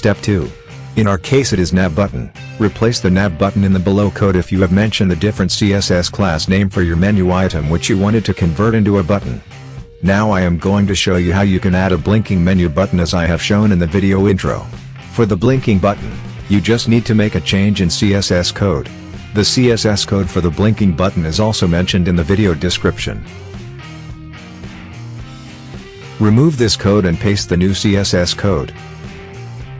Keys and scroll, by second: 25.9 ctrl+a, 27.0 BackSpace.